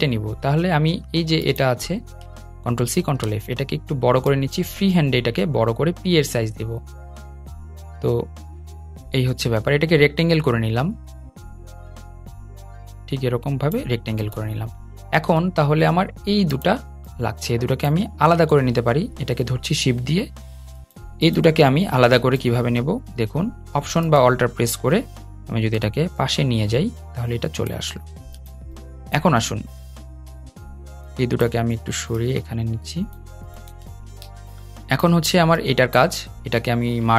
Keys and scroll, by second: 2.5 super+c, 2.7 super+f, 18.0 super+z.